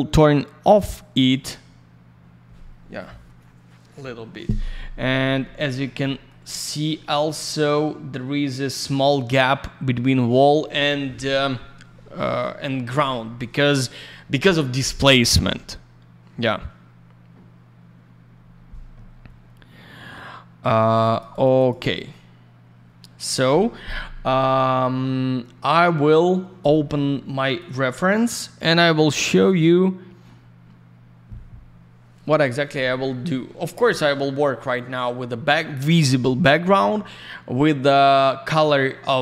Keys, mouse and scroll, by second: 1.1 click, 1.2 click, 5.4 alt+middle click, 6.0 middle click, 6.5 scroll up 1, 6.9 middle click, 7.7-9.0 scroll up 1, 12.3 scroll down 1, 20.9 alt+я, 21.0 click, 21.1 click, 21.3 click, 21.4 double click, 21.5 click, 21.6 click, 21.8 middle click, 23.3 middle click, 23.5 middle click, 27.5 click, 27.6 click, 29.3 click, 29.3 click, 29.4 click, 29.5 double click.